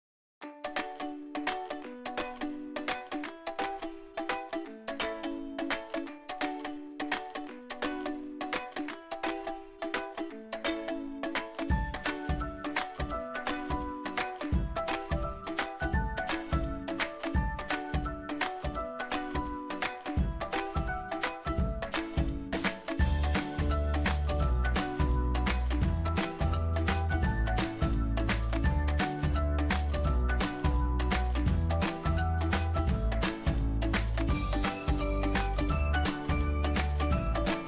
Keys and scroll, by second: 0.8 alt+Right, 2.7 ctrl+d, 6.8 ctrl+d, 9.0 alt+Right.